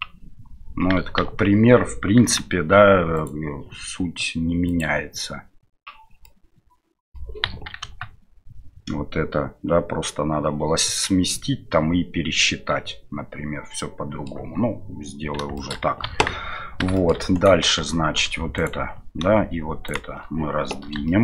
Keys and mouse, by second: 3.1 right click, 4.7 click, 6.2-7.1 middle drag, 7.4 KP_1, 12.5-14.3 middle drag, 15.6 shift+middle click, 17.0 middle click.